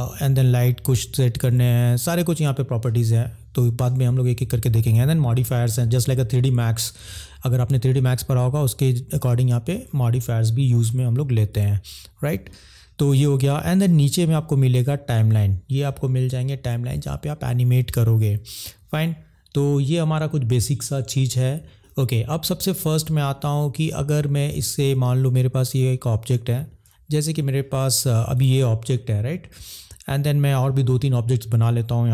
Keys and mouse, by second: 14.0 click, 25.7 click, 26.8 ctrl+z.